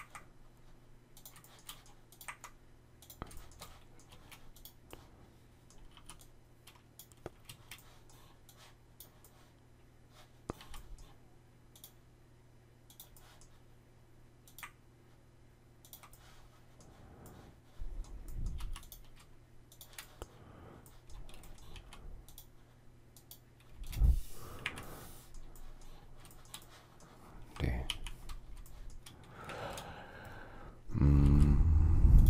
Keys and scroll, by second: 4.0 shift+space, 5.8 r, 7.3 space, 10.4 s, 18.4 m, 21.0-21.6 typing, 23.6 space, 24.5 Delete.